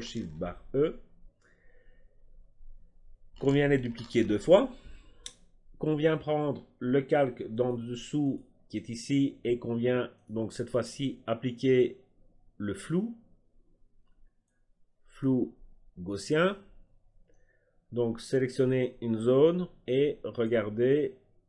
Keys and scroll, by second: 0.0 ctrl+alt+shift+e, 4.1 ctrl+alt+shift+e.